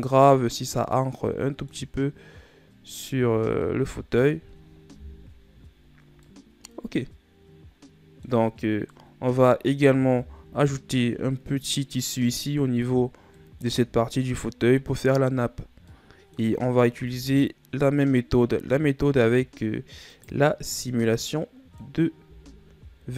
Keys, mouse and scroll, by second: 1.6-2.6 middle drag, 2.6-3.9 scroll up 3, 3.9 a, 4.1 scroll down 2, 4.2-5.6 middle drag, 5.6 KP_1, 6.5 scroll down 3, 6.9-11.0 middle drag, 11.0 KP_1, 12.3-12.8 middle drag, 12.8-13.1 scroll up 2, 13.7 scroll up 1, 14.0-14.5 middle drag, 14.5-16.2 scroll down 3, 16.2-16.5 scroll down 4, 16.5-17.3 middle drag, 17.3 shift+scroll down 1, 17.5-18.0 scroll up 5, 18.0-20.7 middle drag, 20.7 right click, 21.3-22.8 middle drag, 22.8 s.